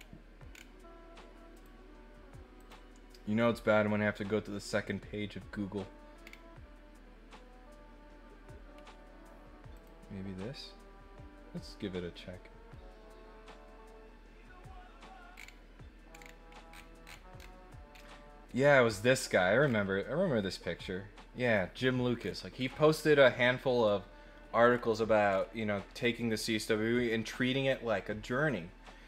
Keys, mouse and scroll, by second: 0.5 middle click, 0.5 scroll down 2, 1.5 click, 2.5 click, 6.2 scroll down 1, 9.7 click, 9.7 right click, 15.3 middle click, 15.3 scroll down 1, 16.1 middle click, 16.2 middle click, 16.7 middle click, 17.0 middle click, 17.3 middle click, 17.9-18.6 scroll up 6, 19.6 scroll down 2, 22.1-22.7 scroll up 4, 22.7 scroll down 2, 22.9 scroll up 2, 24.6 scroll up 2, 25.3 scroll up 2.